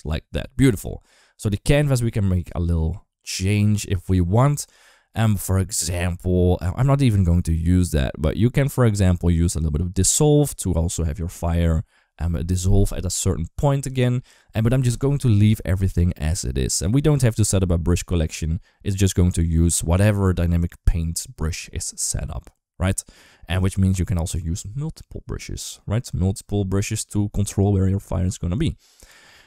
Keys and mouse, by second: 0.6 click, 2.2 click.